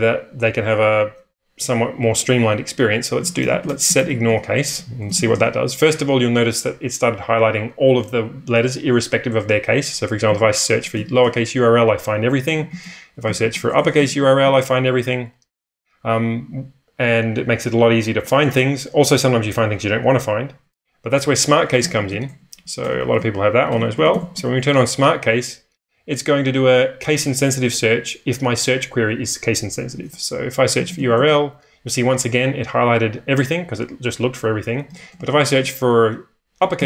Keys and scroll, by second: 3.0-5.9 typing, 9.8-14.5 typing, 21.6-24.6 typing, 29.9-31.4 typing, 34.9-36.8 typing.